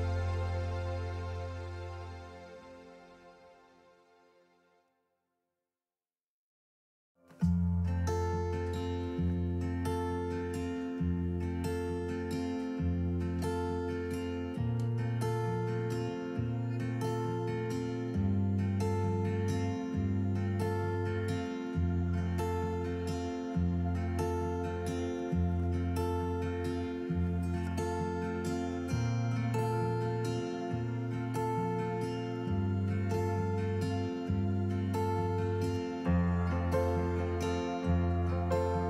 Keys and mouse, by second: 0.0 Tab, 0.8 click, 2.1-3.4 alt+s, 3.6-5.0 alt+s, 5.2 alt+s, 5.3 alt+s, 5.4 alt+s, 5.5-6.3 alt+s, 6.0 alt+click, 8.4 middle click, 9.0-10.7 drag, 12.3 alt+s, 12.8 alt+s, 12.9 alt+s, 13.0 alt+s, 13.1-14.0 alt+s, 13.8 alt+click, 14.2 alt+s, 17.8 click, 18.2 click, 18.8 click, 20.8 Tab, 21.9 Tab, 23.0 Tab, 24.1 click, 26.5 click, 33.0 KP_3, 38.5 g.